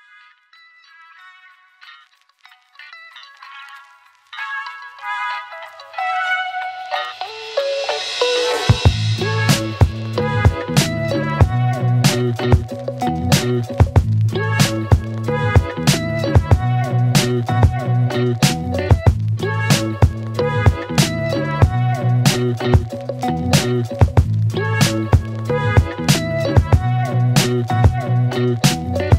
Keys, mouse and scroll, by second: 0.0-0.2 typing, 1.4 click, 8.4 click, 12.3-14.5 click, 15.1-16.5 scroll down 1, 16.9-19.6 click, 21.8 click, 26.2 right click, 28.0 click.